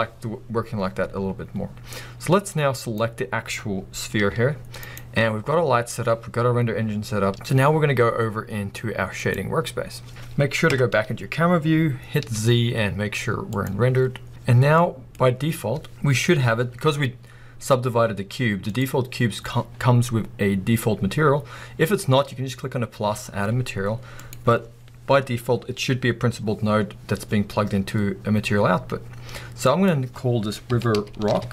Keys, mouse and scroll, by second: 2.8 click, 4.2 g, 5.0 right click, 9.5 click, 10.1 scroll up 1, 10.6 KP_0, 11.8 scroll down 1, 13.7 z, 14.8-20.9 middle drag, 20.9 click.